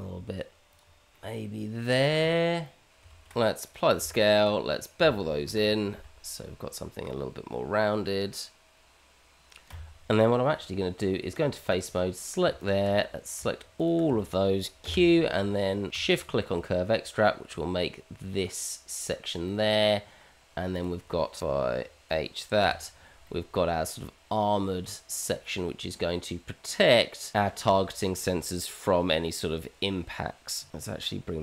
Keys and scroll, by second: 2.9 Tab, 3.0 ctrl+a, 3.4 Tab, 4.1 ctrl+b, 7.4 Tab, 9.7 Tab, 14.8 q, 22.6 h, 30.7 s.